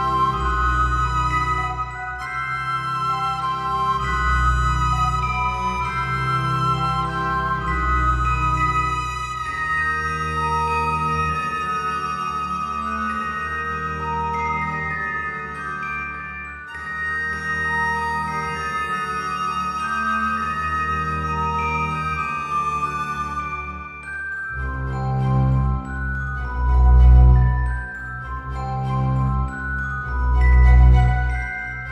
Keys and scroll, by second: 14.9 ctrl+z.